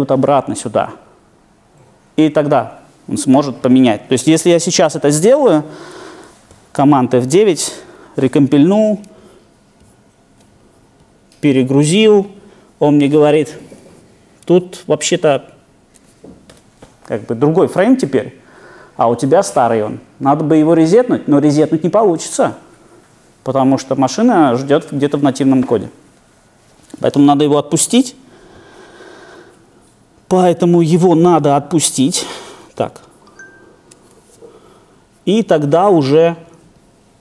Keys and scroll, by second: 9.9 shift+super+F9.